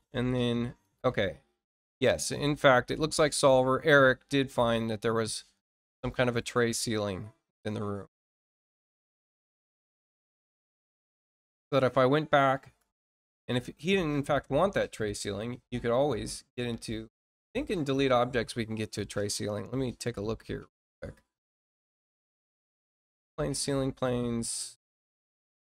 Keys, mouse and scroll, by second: 0.2 middle click, 0.7 click, 9.6-10.6 drag, 14.9 click, 17.6 click.